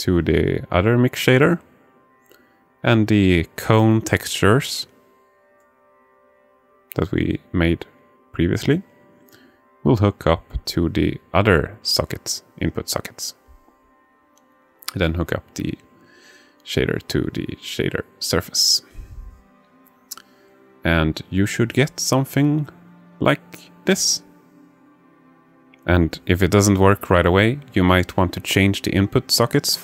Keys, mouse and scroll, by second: 2.1 alt+shift+middle click, 2.9 alt+shift+middle click, 4.9-5.7 drag, 6.1 alt+shift+middle click, 7.7-8.9 alt+shift+middle drag, 8.9 alt+shift+click, 9.5 alt+shift+click, 11.0-13.4 drag, 14.0 shift+click, 14.2 alt+shift+middle click, 15.6-16.8 drag.